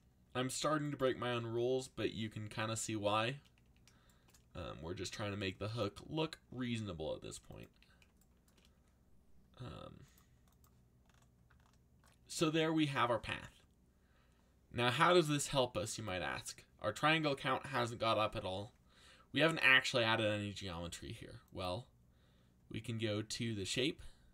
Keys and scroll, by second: 1.3 a, 3.6 a, 6.4 g, 7.7 a.